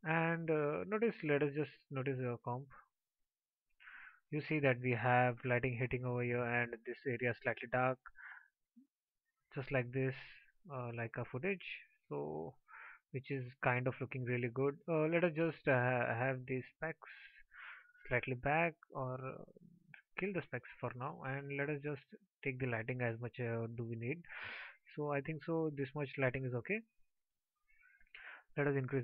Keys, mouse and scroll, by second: 15.1-16.5 alt+drag.